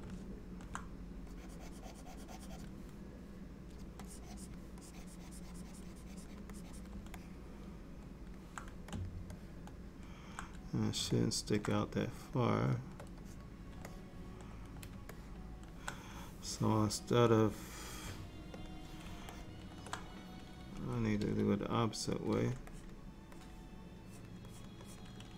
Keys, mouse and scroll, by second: 0.2 alt+middle click, 1.4 click, 4.1 click, 4.9 click, 6.6 click, 7.2 middle click, 9.1 middle click, 9.4 middle click, 11.2 middle click, 12.0 shift+click, 12.7 shift+click, 13.3 click, 14.0 middle click, 15.2 shift+middle click, 17.4 click, 18.7 click, 19.4 ctrl+middle click, 21.2 f, 22.6 click, 22.8 click, 23.4 click, 24.1 click, 24.6 click, 24.9 click.